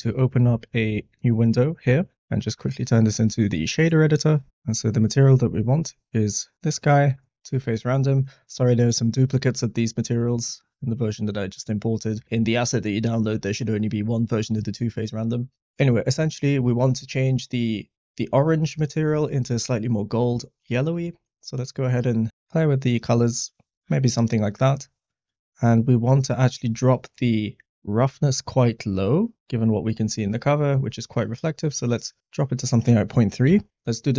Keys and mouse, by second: 2.3-3.4 drag, 4.8 click, 6.9 middle click, 17.4 click, 19.3 middle click, 20.2 click, 25.0 middle click, 26.1-27.9 drag, 29.4 middle click, 32.4-33.7 drag.